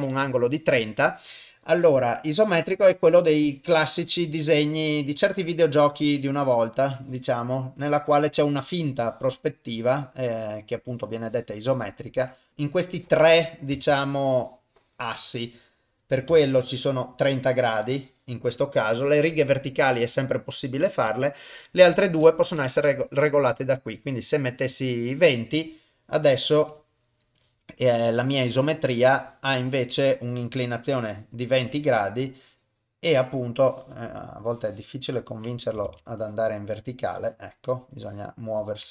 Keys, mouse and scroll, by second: 3.4 click, 4.3 click, 5.3 click, 6.3 click, 7.0 click, 7.8 click, 8.4 click, 9.0 click, 9.7 click, 10.9 click, 11.3 click, 11.7 click, 12.2 click, 12.5 click, 13.9 ctrl+z, 14.2 click, 15.5 click, 16.3 ctrl+z, 16.6 click, 17.2 click, 18.0 click, 21.1-22.9 drag, 25.6 click, 26.5 click, 27.4 click, 28.4 click, 29.1 click, 30.4 click, 31.1 click, 31.7 click, 32.5 click, 33.6 click, 34.5 click, 35.9 ctrl+z, 36.2 click, 37.0 click, 37.9 click.